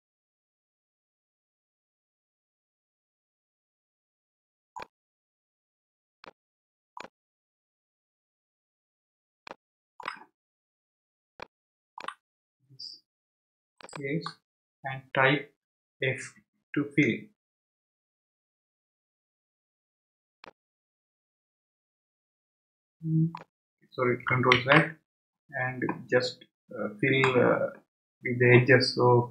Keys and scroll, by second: 16.3 f, 24.5 ctrl+z.